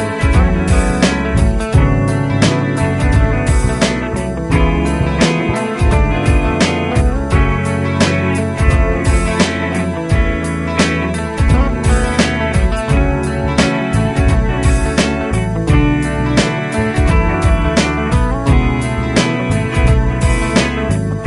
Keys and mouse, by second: 8.0 shift+click, 14.6 Down, 16.7 Delete, 18.3 Up, 20.4 F2.